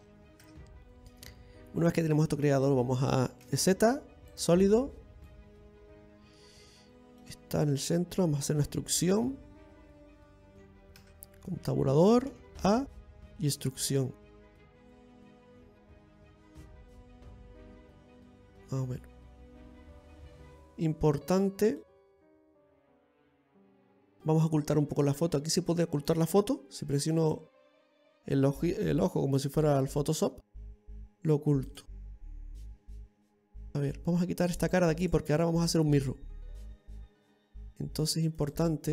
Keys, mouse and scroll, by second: 22.7-23.8 scroll down 3, 23.8 right click, 23.8-24.4 scroll down 1, 27.9 click, 28.5 scroll down 3, 28.8 middle click, 29.4-30.3 scroll up 5, 30.3 middle click, 32.4 click, 33.4 right click, 33.9 shift+right click, 35.3-38.9 ctrl+shift+right click.